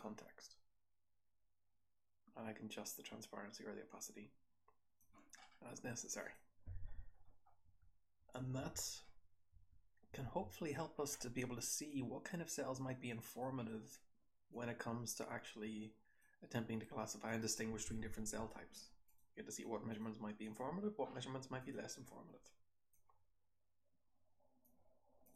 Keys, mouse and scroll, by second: 5.6-6.1 scroll up 2, 6.1 click, 6.1-6.6 scroll up 2, 6.7-10.0 typing, 7.2-9.0 scroll down 6, 9.0-11.8 scroll up 5, 13.8-15.7 scroll down 3, 14.4-16.1 drag, 15.7-16.2 scroll down 1, 17.2 click, 17.8 h, 17.9-18.3 scroll down 1, 18.3 h.